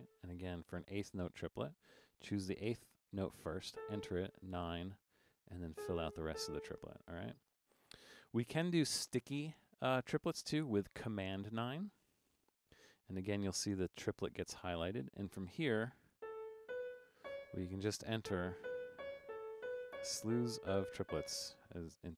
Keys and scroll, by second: 0.0-0.7 typing, 3.8-6.3 typing, 12.4 super+9, 16.2-21.1 typing.